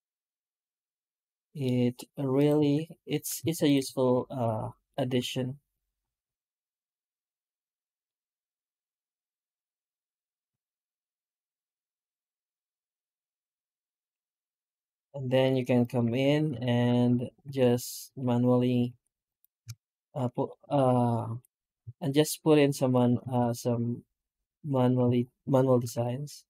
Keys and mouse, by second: 0.7-1.4 middle drag, 1.5 middle click, 2.2 right click, 2.4 Tab, 3.2 alt+a, 3.5 right click, 3.9 shift+right click, 4.4 middle click, 5.6 shift+right click, 5.9 q, 7.9 middle drag, 8.3-8.6 middle drag, 8.8 Tab, 9.3 shift+q, 12.4 middle click, 13.0-13.6 middle drag, 13.7 middle click, 14.2 alt+shift+z, 14.4 shift+middle drag, 14.9-15.3 middle drag, 15.6 right click, 15.9 Tab, 16.4 alt+shift+z, 17.3 Tab, 17.7 right click, 17.9 Tab, 18.7 alt+a, 19.1 right click, 20.2 ctrl+shift+right click, 21.2 i, 23.1 alt+s, 24.9 Tab, 25.7 alt+a, 25.9 middle drag, 26.4 middle click.